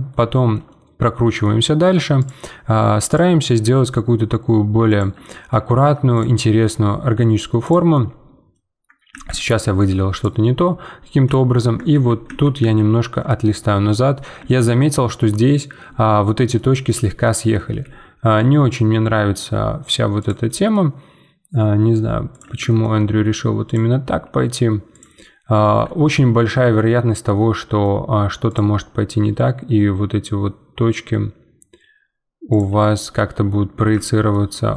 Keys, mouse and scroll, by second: 2.2-3.6 drag, 3.6 g, 5.3 middle click, 6.1 click, 6.5 g, 7.9-9.1 middle drag, 9.1 ctrl+z, 10.1 click, 10.4-11.9 middle drag, 11.9 ctrl+z, 12.2 ctrl+z, 13.4-14.9 middle drag, 14.9 scroll down 2, 15.3-17.6 middle drag, 17.6 g, 20.4 middle click, 20.9 g, 22.6-23.7 shift+middle drag, 23.7 click, 24.0 g, 25.2-28.5 middle drag, 28.5 click, 28.9 g, 32.8 Tab, 33.1 middle click, 33.5 Tab, 34.0-34.7 shift+middle drag.